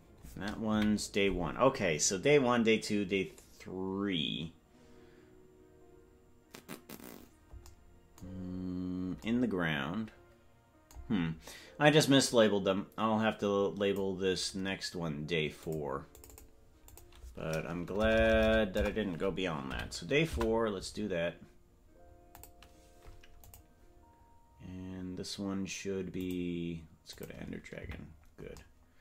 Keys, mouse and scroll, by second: 0.7 KP_Decimal, 2.4-4.5 scroll down 1, 4.5-7.6 scroll down 2, 8.4 scroll down 3, 8.4-9.2 scroll down 2, 9.2 scroll down 1, 12.2-14.1 drag, 14.4 scroll up 3, 14.5 scroll down 1, 14.5-15.6 scroll up 1, 15.6 click, 16.1 click, 16.3-20.8 drag, 18.1 BackSpace, 18.2 BackSpace, 19.4 BackSpace, 22.3 click, 26.1 click, 27.0 click, 27.7 KP_Decimal.